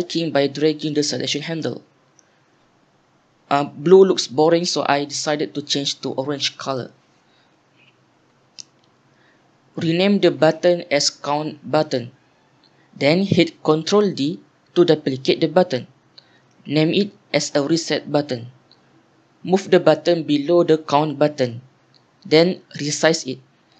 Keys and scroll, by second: 9.3 F2, 10.1 Home, 10.4-11.9 typing, 12.0 Return, 14.8-15.5 typing, 16.9 F2, 17.4-19.4 typing, 22.9-23.7 typing.